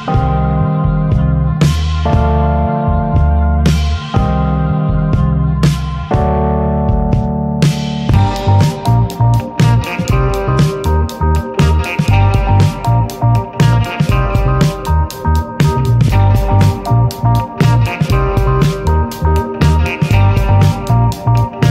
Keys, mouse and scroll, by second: 1.6 alt+z, 2.4 scroll up 2, 2.9 click, 3.8 click, 5.8 click, 6.6 scroll down 5, 6.9 alt+z, 7.3 alt+z, 7.7 Tab, 7.9 click, 8.2-9.1 shift+middle drag, 9.5 scroll up 1, 9.7 ctrl+s, 9.8 click, 10.2 shift+middle click, 10.3 scroll up 1, 13.1-13.7 drag, 13.7 ctrl+s, 13.9 click, 14.0 Tab, 14.5 Tab, 15.4-16.2 drag, 16.2 Tab, 16.6 Tab, 17.1 ctrl+1, 17.5-18.6 middle drag, 18.6-19.8 drag, 19.8 Tab, 20.1 middle click, 20.4-21.0 scroll up 1, 21.0 2, 21.5 click.